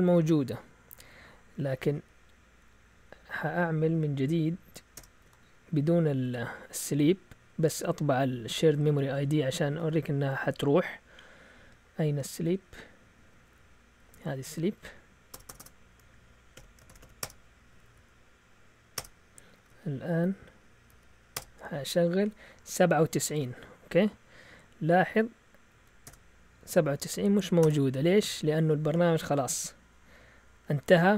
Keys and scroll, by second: 1.8 alt+Tab, 3.1 Up, 3.5 Up, 3.8 Up, 4.9 Return, 5.2 Down, 5.3 Up, 6.3 Down, 6.9 Down, 7.0 Down, 7.1 Down, 7.2 Down, 7.3 Down, 7.4 Down, 9.3 Down, 9.5 Up, 9.7 Up, 12.7 typing, 15.3-17.4 typing, 17.7 Up, 17.8 Up, 17.9 Up, 19.0 Return, 19.6 Up, 19.7 Up, 20.9 Up, 21.4 Return, 23.4 alt+Tab, 24.5 Up, 25.0 Up, 25.8 Down, 26.1 Return, 27.3 Up, 27.6 Return, 28.3 Tab.